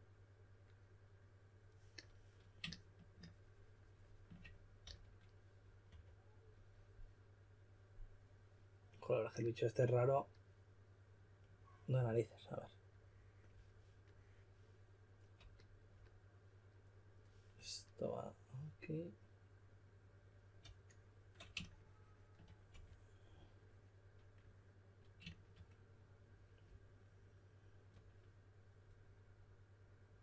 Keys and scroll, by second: 4.8-6.3 typing, 22.7 4.